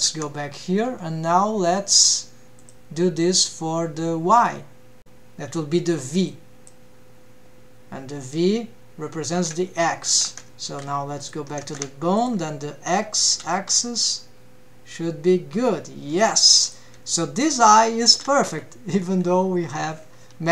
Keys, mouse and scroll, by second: 0.0 Tab, 2.6-6.7 drag, 10.2 ctrl+Tab, 11.2 click, 11.7 ctrl+Tab, 12.1 drag, 13.0 g, 17.0 g.